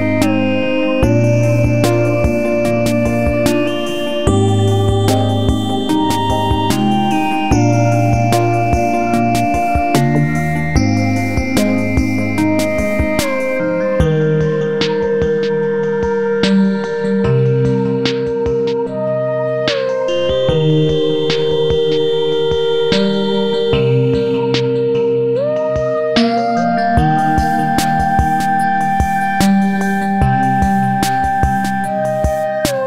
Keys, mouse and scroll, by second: 0.2-4.7 drag, 4.8-7.2 drag, 7.3 F4, 8.3 click, 9.6 click, 10.0 click, 11.4-14.3 drag, 15.5 click, 16.7-18.4 drag, 18.4 scroll up 1, 18.7-20.5 drag, 20.5 click, 22.8-25.2 drag, 27.0 click, 28.7 ctrl+Num_Lock, 28.7 click, 29.6 ctrl+q, 30.1 click, 30.9 scroll up 1, 31.1 click, 32.1 click.